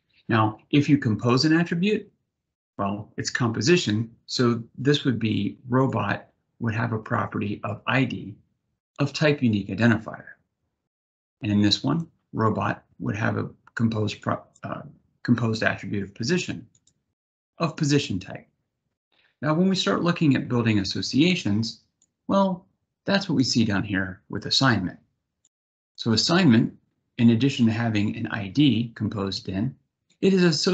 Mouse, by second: 5.5 click, 6.8 click, 8.4 click, 11.3 click, 13.8 click, 16.4 click, 21.7-23.0 drag, 25.2 click, 29.7 click.